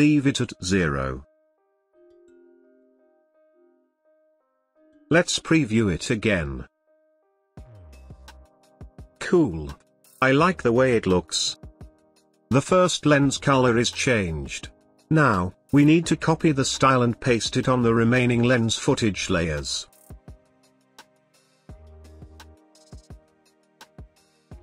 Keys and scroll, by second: 14.9 ctrl+c, 19.4 ctrl+v.